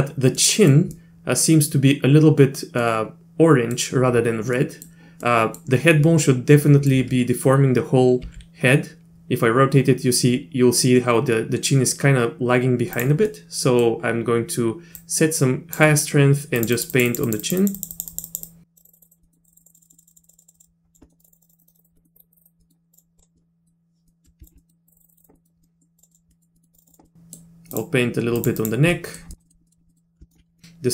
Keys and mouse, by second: 0.4 middle click, 1.0 middle click, 2.8 middle click, 4.6 middle click, 5.3 middle click, 6.1 middle click, 8.3 r, 13.3 middle click, 15.1 click, 16.6 click, 16.8 click, 16.9 click, 17.1 click, 17.3 click, 17.4 click, 17.6 click, 17.8 click, 17.9 click, 18.1 click, 18.3 click, 18.5 click, 18.8 click, 18.9 click, 19.0 click, 19.2 middle click, 19.4 click, 19.5 click, 19.6 click, 19.7 click, 19.8 click, 19.9 click, 20.0 click, 20.1 click, 20.2 click, 20.3 click, 20.4 click, 20.5 click, 20.6 click, 21.0 middle click, 21.2 click, 21.3 click, 21.4 click, 21.4 click, 21.5 click, 21.8 click, 22.0 middle click, 22.2 click, 22.3 click, 22.4 click, 22.6 middle click, 22.9 click, 23.2 click, 23.4 middle click, 24.1 middle click, 24.4 ctrl+click, 24.6 middle click, 24.9 click, 25.0 click, 25.0 click, 25.1 click, 25.4 middle click, 25.6 middle click, 26.0 click, 26.1 click, 26.3 middle click, 26.6 middle click, 26.7 click, 26.9 click, 27.1 middle click, 27.7 click, 28.4 click, 28.6 click, 28.9 middle click, 29.3 middle click, 29.4 middle click, 29.7 middle click, 29.9 middle click, 30.3 ctrl+click, 30.6 middle click.